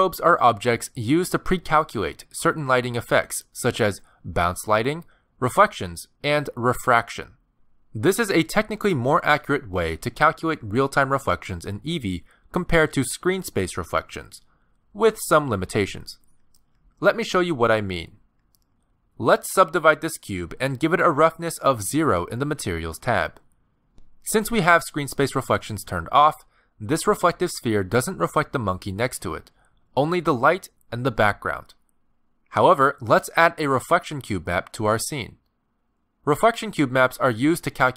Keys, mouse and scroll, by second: 19.9 click, 21.1 ctrl+2, 21.5 right click, 23.5 click, 24.2 scroll down 8, 25.1 click, 26.8 click, 29.0 middle click, 30.6 middle click, 35.8 shift+a.